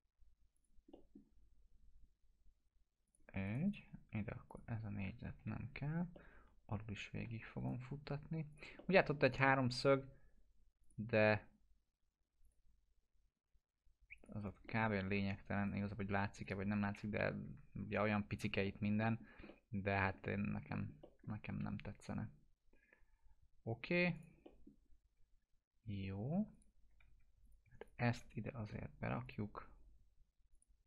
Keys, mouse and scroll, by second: 0.5 click, 0.9 middle click, 3.0 click, 3.4 right click, 4.5 click, 5.3 ctrl+BackSpace, 6.1-7.4 alt+middle drag, 7.6 right click, 8.5 click, 8.7-9.4 middle click, 9.7 scroll down 1, 10.8 click, 14.4 right click, 14.6-15.3 alt+middle click, 15.3 scroll up 1, 15.5 right click, 16.0 scroll up 1, 16.4 click, 17.1 ctrl+BackSpace, 17.7 scroll down 1, 18.6 alt+middle click, 19.2 scroll down 1, 19.4-20.4 alt+middle click, 20.5 scroll up 1, 20.7 middle click, 21.0 alt+middle click, 24.1 click, 24.4 middle click, 26.5 click, 27.0 2, 27.4 click.